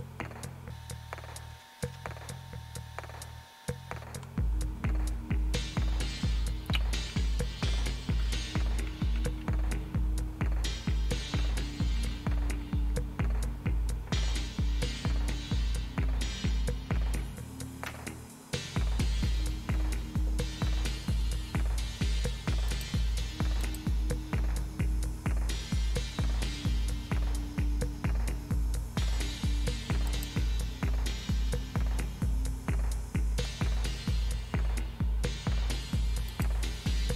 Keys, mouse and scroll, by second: 7.1 alt+super+r, 8.3-9.7 typing, 11.9 Down, 12.1 Down, 17.8 Return, 22.7 click, 23.6 click, 30.1 click, 36.3 click.